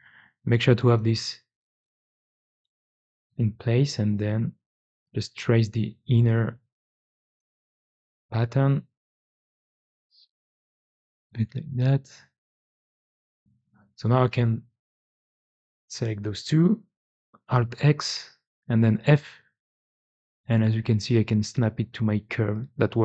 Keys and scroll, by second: 0.3 Tab, 3.6 1, 9.2 Tab, 13.3 2, 17.6 alt+x, 18.9 f.